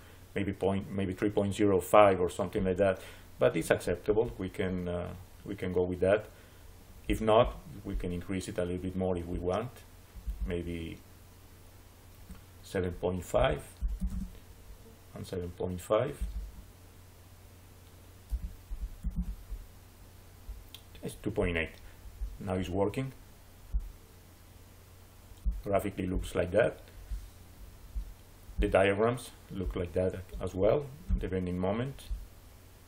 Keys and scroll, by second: 12.9-14.3 typing, 17.8-19.3 typing.